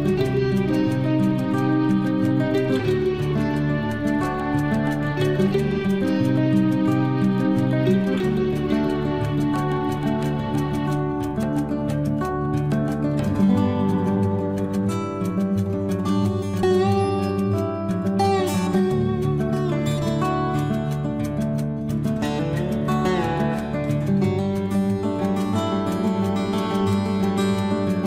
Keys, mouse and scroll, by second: 1.2 shift+scroll down 1, 2.0 space, 2.3 click, 2.3-3.7 drag, 3.7 Delete, 4.4-6.2 scroll down 1, 6.3 scroll up 1, 9.7 t, 11.2-12.7 scroll up 1, 12.7 click, 14.0-15.9 typing, 16.3 Return, 17.8 click, 19.1 typing, 19.3 Return, 20.2 scroll up 1, 20.7 click, 23.2-24.5 typing, 25.7 click, 27.0 9, 27.2 Return.